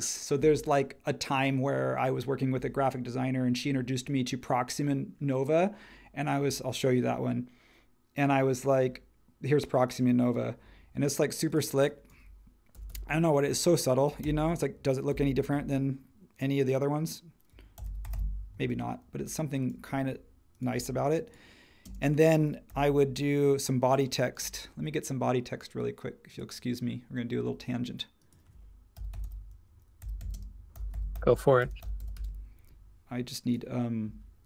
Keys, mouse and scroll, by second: 12.7-15.5 typing, 17.5-19.0 typing, 21.8 space, 22.7 t, 24.4 space, 28.7-32.5 typing.